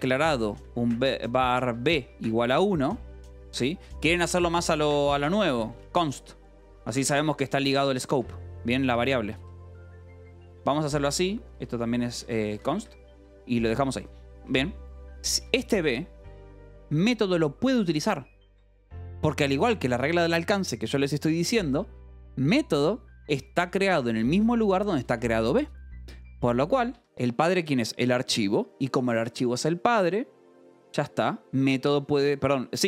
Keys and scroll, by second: 0.0-5.9 typing, 3.5 Escape, 6.8 Escape, 7.0 j, 7.6 o, 8.0 Escape, 8.6-14.7 typing, 15.9 shift+v, 16.4 Escape, 16.5 j, 17.5 shift+v, 19.0 Escape, 22.6 shift+v, 23.8 Escape, 24.2 k, 24.8 j, 25.4 v, 26.9 Escape, 30.5-32.8 typing.